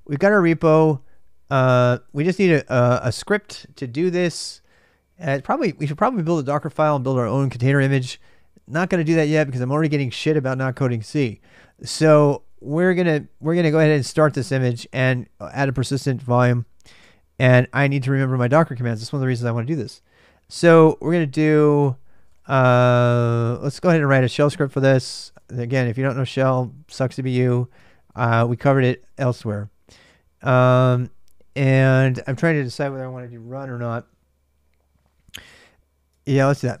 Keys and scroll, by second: 0.0-36.8 typing.